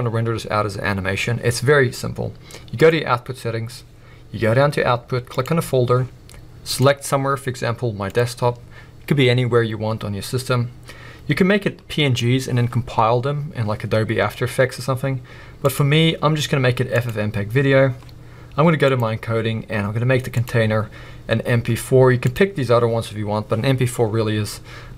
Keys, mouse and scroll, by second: 0.1 click, 5.5 click, 6.6 click, 10.5-24.9 drag.